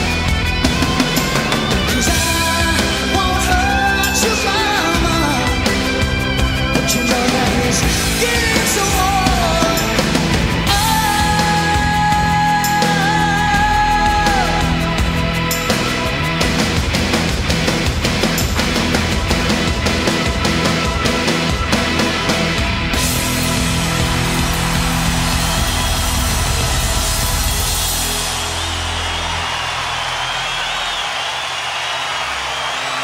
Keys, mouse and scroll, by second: 3.8 z, 14.4 right click, 15.3-20.3 middle drag, 20.3-20.9 right drag, 20.9 middle click, 21.0-24.5 right drag, 24.5-32.3 middle drag, 32.3-33.0 right drag.